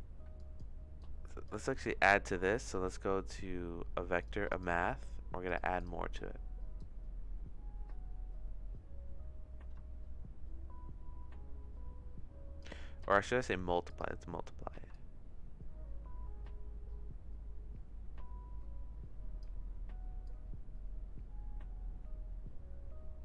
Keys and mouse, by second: 0.4 click, 1.0 click, 1.7 shift+a, 6.9-12.6 drag, 13.1 click, 15.0-19.4 shift+drag, 20.2-23.2 drag.